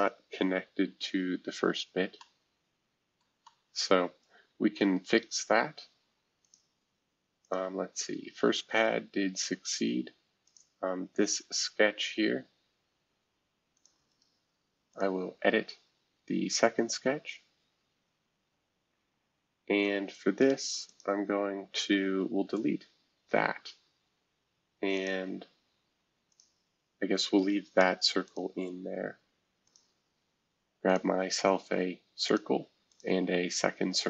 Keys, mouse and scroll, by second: 0.6-1.3 scroll down 1, 1.6-2.2 scroll down 2, 2.2-6.4 middle drag, 6.4-9.3 drag, 9.4 space, 10.4-12.0 drag, 13.7-16.2 drag, 16.2-17.4 scroll down 1, 17.4-18.8 scroll down 1, 18.8-19.3 scroll down 1, 20.8-22.4 drag, 22.4 Delete, 24.9-27.8 drag, 28.2-31.0 drag, 32.2 click, 32.9 click, 33.2 Escape.